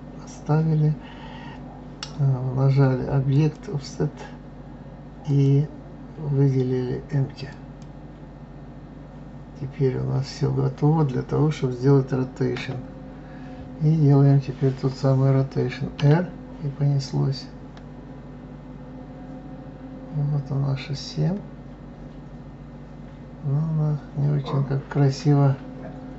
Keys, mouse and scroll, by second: 3.3 click, 5.3-8.3 drag, 12.6 KP_7, 13.5-14.0 scroll down 2, 16.0 r.